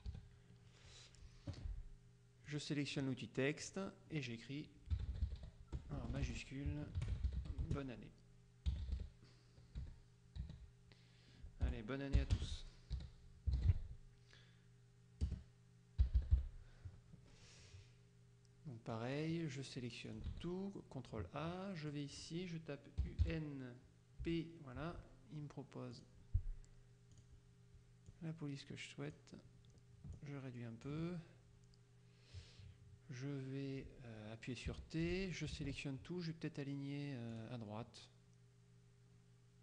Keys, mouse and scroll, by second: 0.1 KP_5, 1.6 F1, 2.5 click, 3.7 click, 4.8-9.4 typing, 10.5 e, 11.7 Return, 12.5-14.3 typing, 15.3 space, 19.0 click, 20.1 ctrl+click, 20.4 ctrl+a, 22.0 click, 23.1 u, 23.3 n, 24.3 p, 26.0 click, 27.2 click, 28.1-29.7 drag, 30.2 ctrl+click, 34.8 t, 35.1 click, 35.7 ctrl+a, 37.5 click.